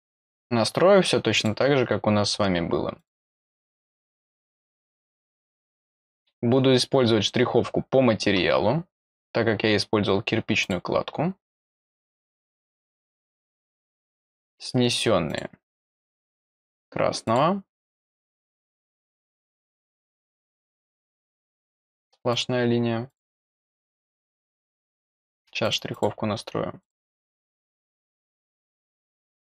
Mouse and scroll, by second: 1.3 click, 2.9 click, 10.6 click, 12.3 click, 13.3 click, 13.7 click, 14.9 click, 15.2 click, 15.7 click, 16.7 click, 17.2 click, 18.3 click, 20.9 click, 22.3 click, 23.0 click, 23.9 click, 24.3 click, 25.6 click, 25.9 click, 26.8 click, 27.6 click, 29.2 click.